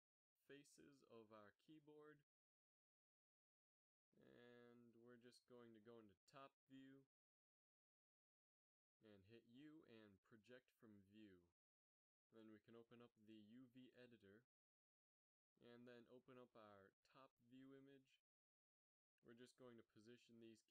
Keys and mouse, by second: 0.1 b, 2.5 z, 6.3 u, 8.6 KP_7, 11.8 u, 14.8 u.